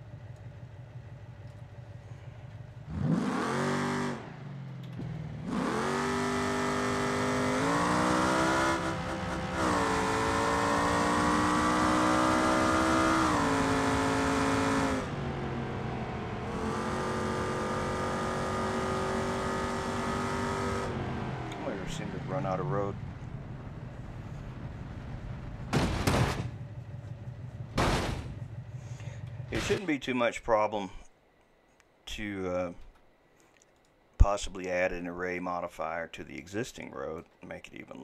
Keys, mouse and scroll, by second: 32.9 Delete, 33.8 click, 36.8-38.0 shift+middle drag.